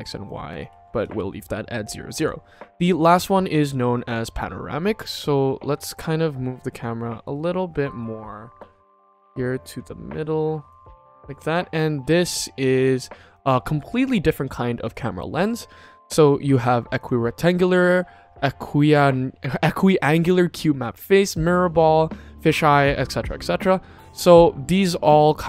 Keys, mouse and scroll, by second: 0.5 ctrl+z, 0.9 ctrl+s, 2.1-2.8 drag, 5.6 q, 6.1-7.1 middle drag, 7.3-7.7 shift+middle drag, 7.9 middle click, 8.7-10.7 shift+middle drag, 11.4 shift+middle click, 12.7 click, 14.8-15.4 drag, 16.9-23.5 drag, 24.7-25.4 drag.